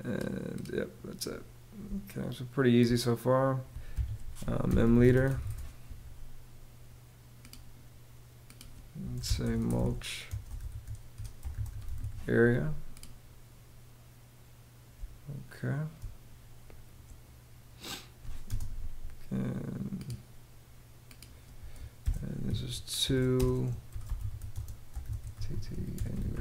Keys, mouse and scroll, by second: 1.4 space, 3.5 Escape, 4.0-5.5 typing, 8.6-12.0 typing, 14.5 space, 18.0 space, 21.6-26.4 typing.